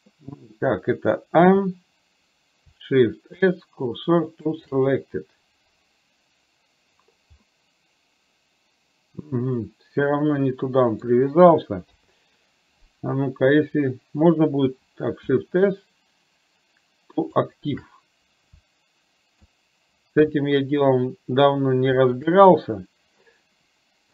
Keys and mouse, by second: 1.5 a, 3.3 shift+s, 7.6-11.1 middle drag, 12.0 KP_3, 15.3 shift+s, 19.5 shift+s.